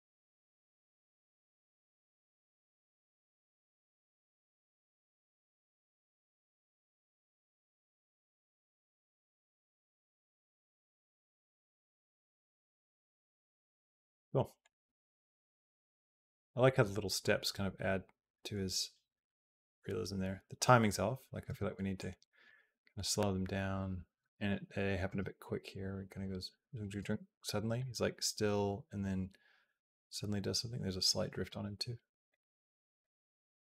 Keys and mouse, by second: 13.6 space, 14.4-16.0 drag, 15.9 space, 21.3 space, 21.8 click, 22.3 space, 24.0 space, 24.3 click, 24.9 space, 26.9 space, 27.6-31.3 drag, 32.1 click.